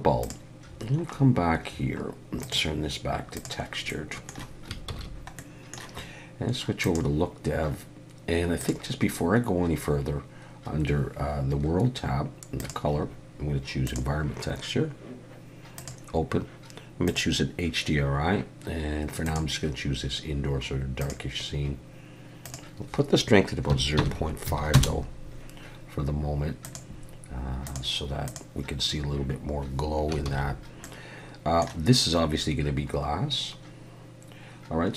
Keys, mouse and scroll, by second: 0.2 click, 0.7-2.4 scroll down 10, 2.4 click, 3.9 middle click, 4.9 ctrl+s, 5.4 middle click, 7.0 click, 8.6 click, 12.6 click, 15.8 click, 22.4 click, 26.6 click, 29.5 scroll up 1, 30.3 ctrl+s, 30.8 middle click.